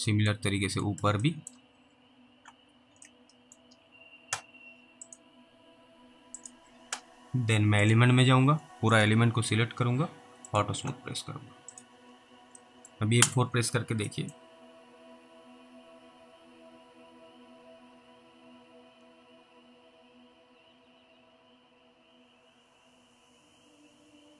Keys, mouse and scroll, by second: 0.0 alt+middle click, 0.3 scroll down 1, 0.4 middle click, 1.0 alt+middle click, 1.6 middle click, 1.7-2.1 scroll up 2, 2.7 scroll down 1, 3.4 alt+middle click, 3.9 scroll up 1, 5.1 click, 12.2 scroll down 1, 12.9 middle click, 13.2 F4, 13.5-14.1 scroll down 2, 14.4 scroll down 1.